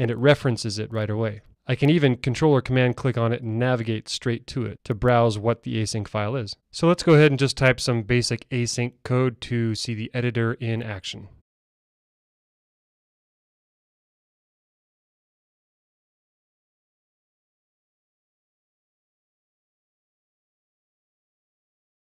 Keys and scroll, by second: 11.3 alt+super+v, 14.2 Return, 16.4 Tab, 18.9 Tab.